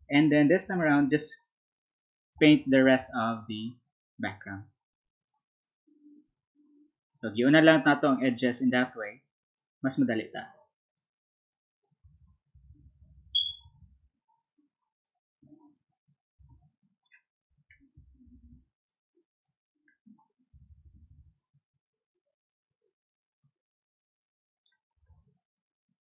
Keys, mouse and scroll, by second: 4.3-9.4 drag, 9.5-11.4 drag, 11.4-12.4 drag, 14.3 click, 16.4 ctrl+z, 17.7 click, 18.8 click, 19.9 click, 21.3-24.6 drag.